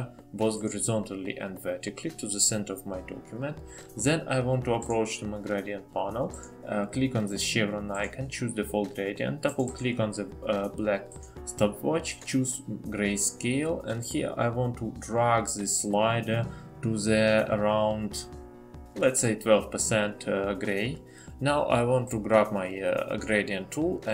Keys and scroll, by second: 17.2-17.9 typing.